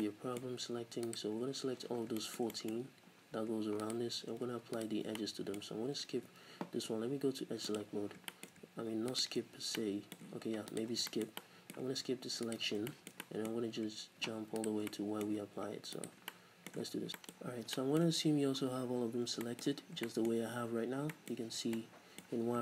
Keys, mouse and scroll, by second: 1.1 alt+right click, 2.0 scroll down 1, 2.2-3.8 shift+middle drag, 3.1 scroll up 1, 3.8 alt+right click, 4.8 alt+right click, 5.2-7.8 middle drag, 6.3 ctrl+z, 6.8 z, 7.8 click, 8.1-9.2 shift+middle drag, 8.1 scroll down 2, 9.2 alt+right click, 9.8 middle click, 10.7 alt+right click, 11.1-12.5 shift+middle drag, 12.5 alt+right click, 12.7 scroll down 2, 12.9 shift+middle click, 13.6-14.6 scroll up 2, 14.0 middle click, 14.6 alt+right click, 14.9-16.0 middle drag, 16.0 alt+right click, 16.3-22.6 middle drag, 17.4-17.8 scroll up 2, 18.9-20.0 scroll down 4, 21.4 z, 22.3 z.